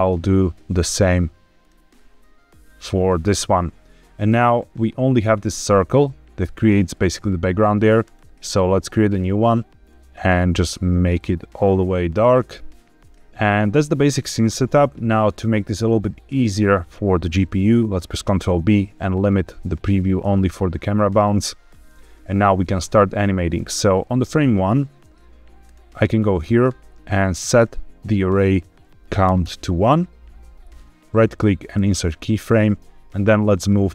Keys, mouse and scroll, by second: 0.6-1.6 drag, 2.7-7.3 drag, 7.9 click, 9.0 click, 13.0 click, 15.5-15.9 scroll up 1, 15.9-16.6 scroll down 1, 16.6-17.9 scroll up 1, 18.2 ctrl+b, 23.9 click, 25.6 click, 27.4 click, 28.4-29.4 drag, 31.0 right click, 31.4-33.9 drag.